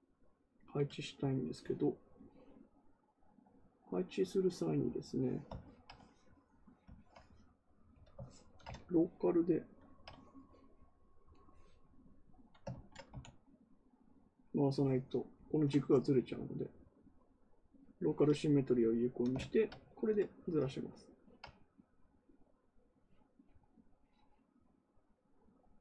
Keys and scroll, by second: 13.0 x.